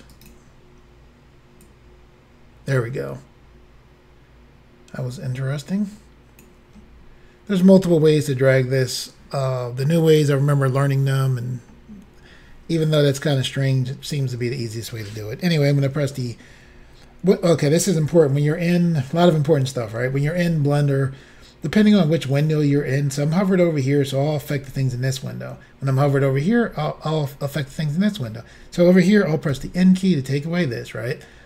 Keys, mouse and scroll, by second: 0.1 right click, 1.7 click, 29.5 n.